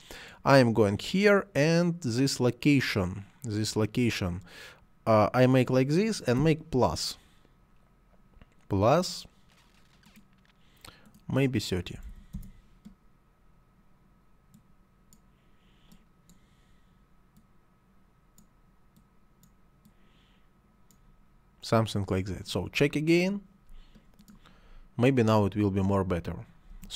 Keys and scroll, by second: 11.8 3, 11.9 0, 12.2 Return, 26.5 space.